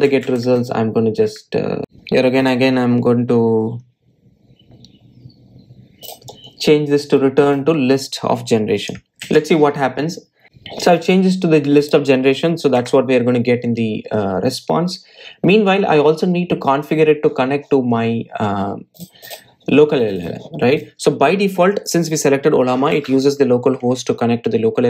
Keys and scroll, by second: 1.8 Delete, 10.1 super+s, 13.7 Delete.